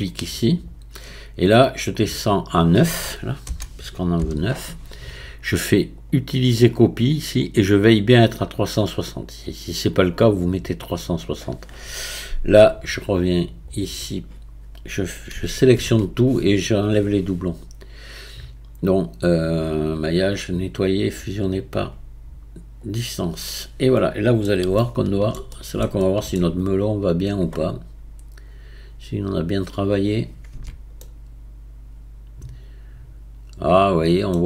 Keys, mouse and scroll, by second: 0.5-5.5 drag, 6.5 click, 13.7-15.3 drag, 15.3 a, 15.7 a, 19.9-22.9 drag, 23.5-28.1 middle drag, 28.1-30.0 scroll down 8, 30.0 click, 30.9 Tab, 31.0-34.0 middle drag.